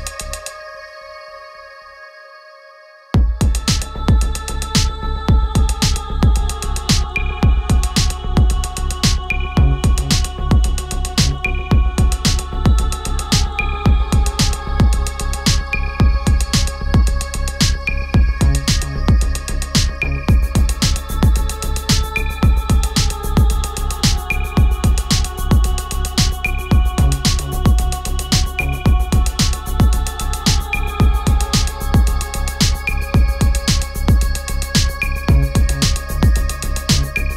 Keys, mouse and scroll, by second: 1.6-9.6 drag, 14.9 click, 17.8 F4, 19.7-31.6 drag, 31.4 shift+s.